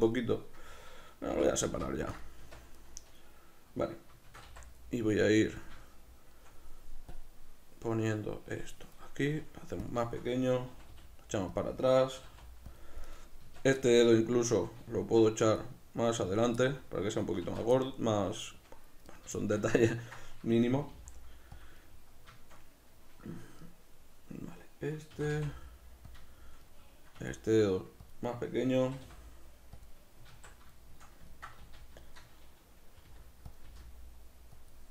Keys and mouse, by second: 1.3 l, 2.7-4.3 right drag, 4.3 shift+d, 5.6 click, 5.8-7.1 shift+middle drag, 7.1-9.9 drag, 9.3 s, 10.0-11.6 shift+middle drag, 10.7 g, 11.6 click, 12.2 g, 12.8 click, 13.0 right click, 13.4 Tab, 13.8-15.6 shift+middle drag, 15.6 click, 16.6-21.6 middle drag, 17.4 b, 17.6 Tab, 20.8 g, 21.6 click, 25.2 shift+d, 26.2 shift+click, 26.3 shift+middle click, 27.2 s, 28.1 click, 28.2-29.8 middle drag, 28.8 g, 29.8 click, 30.3 alt+q, 30.8-33.5 shift+middle drag, 31.6 z, 33.1 r, 33.5 click, 33.6 g, 34.7 click.